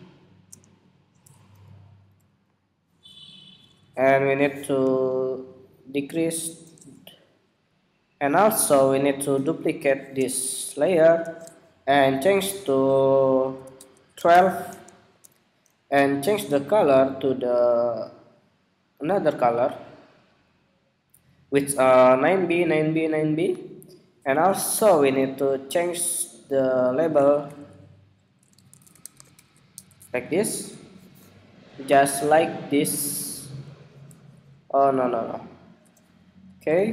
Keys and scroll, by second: 4.8 alt+Right, 5.2 alt+Left, 24.4 super+=, 29.5 Escape, 31.3 alt+Up, 32.5 alt+Up, 33.3 alt+Up, 34.7 alt+Down, 35.3 alt+Down, 36.5 super+-.